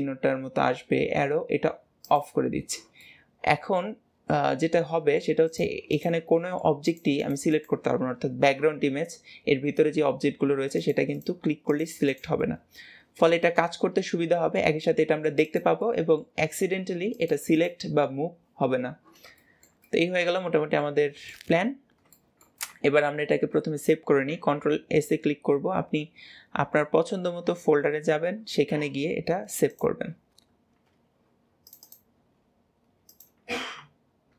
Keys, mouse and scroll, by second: 1.9 click, 2.8-5.4 middle drag, 5.4 click, 5.8 click, 6.2 middle click, 6.8 click, 7.0 click, 7.4 click, 10.7 click, 11.0 click, 11.5 click, 11.9 click, 12.2-15.3 middle drag, 15.3 click, 15.7-17.0 middle drag, 17.0 click, 17.4 click, 19.3-21.4 shift+middle drag, 21.4 scroll up 2, 22.0-24.4 shift+middle drag, 24.4 ctrl+s.